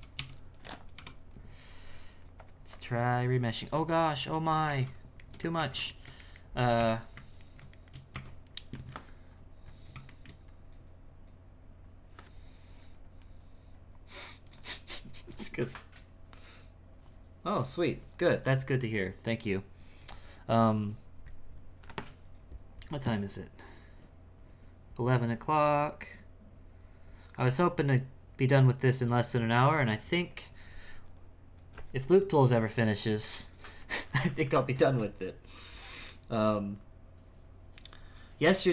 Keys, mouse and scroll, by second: 4.0 middle click, 4.7 ctrl+z, 5.3 shift+middle click, 5.6 ctrl+z, 5.9 shift+middle click, 6.7 KP_1, 7.4 ctrl+middle click, 8.1 Tab, 9.3-10.0 scroll up 4, 10.0 shift+middle click, 10.4-11.7 scroll up 4, 11.7-12.8 scroll down 6, 12.8-14.4 scroll down 2, 14.4-38.7 drag.